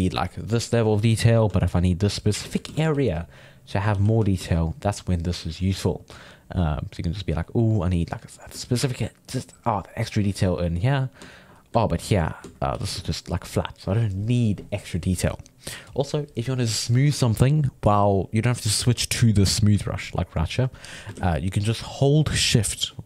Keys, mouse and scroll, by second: 1.3-2.6 ctrl+middle drag, 2.6 shift+c, 2.8 f, 3.1 click, 3.9 f, 4.9-7.4 drag, 7.4 ctrl+middle click, 7.9 click, 8.6 ctrl+middle click, 9.2-11.3 drag, 11.3-12.7 ctrl+middle drag, 12.7 f, 13.0-16.1 shift+drag, 19.5-21.2 drag, 21.2 ctrl+z, 22.8-23.0 drag.